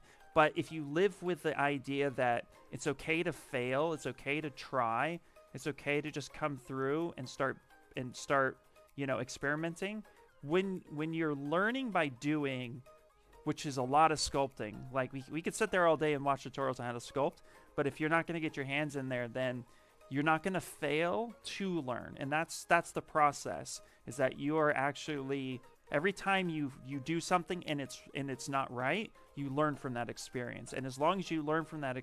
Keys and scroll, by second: 1.2 s, 7.9 s.